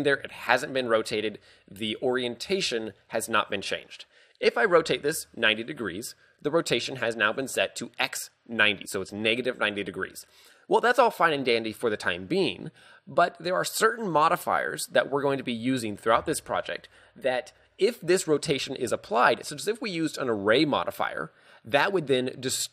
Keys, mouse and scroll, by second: 4.8 r.